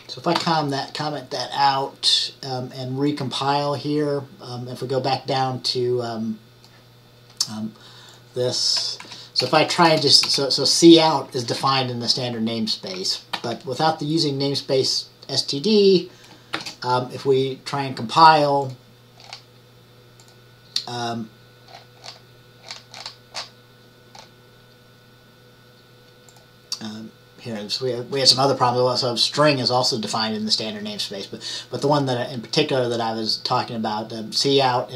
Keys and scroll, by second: 0.5 ctrl+s, 9.1 Left, 9.5-10.3 typing, 11.5 Up, 11.7 Up, 13.5 ctrl+s, 16.6 ctrl+shift+@.